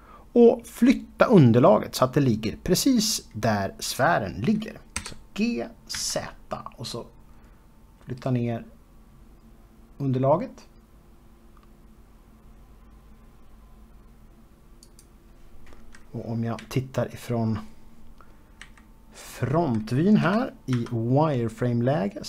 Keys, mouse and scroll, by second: 5.7 g, 6.7 z, 15.6 click, 17.3 KP_3, 19.3 KP_1, 21.0 z.